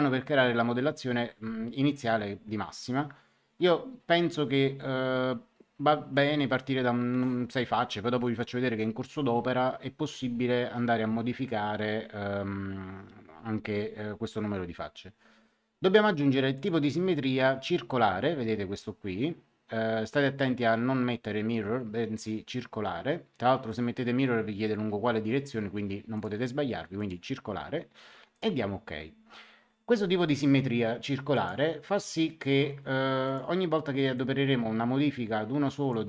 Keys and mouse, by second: 6.1 KP_6, 16.5 click, 23.6 click, 26.1 click, 28.3 click, 31.3 click, 33.2 click.